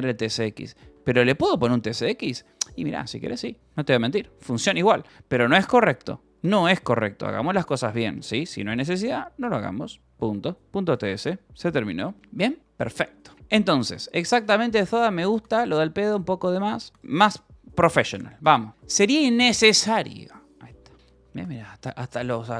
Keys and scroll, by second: 0.0-1.2 typing, 0.5 Escape, 1.4 Escape, 2.4 Return, 2.8-5.0 typing, 3.6 Return, 6.8 a, 6.9 BackSpace, 7.1 Escape, 8.4 Return, 8.8 y, 9.7 :, 13.1-16.1 typing, 18.4-19.6 typing, 21.0 j, 21.3 k, 22.0 k.